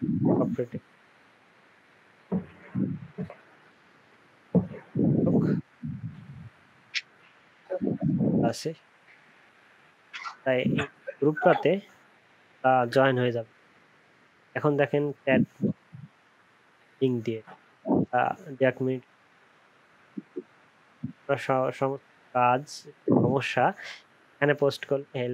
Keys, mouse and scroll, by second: 10.3 ctrl+c, 10.4 typing, 11.4 ctrl+v.